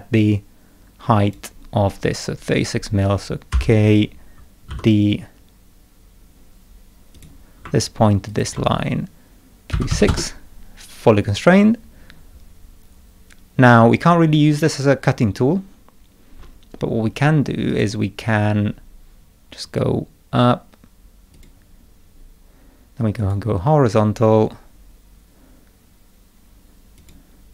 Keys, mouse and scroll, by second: 3.5 k, 4.7 d, 7.1 click, 8.3 ctrl+click, 17.7 click, 19.6 click, 21.3 click, 23.2 click, 27.0 click.